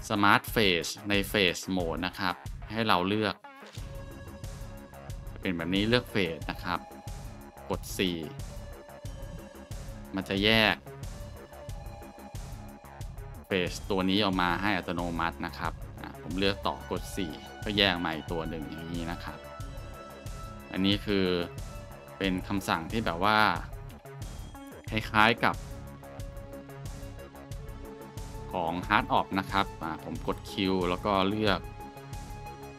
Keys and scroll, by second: 4.0-4.3 scroll, 8.5 4, 8.7 scroll, 9.7 Tab, 12.2 g, 13.9 Tab, 14.6 a, 17.1 4, 18.1 Tab, 24.0 Delete, 25.3 Tab, 27.3-28.0 scroll, 30.1 q.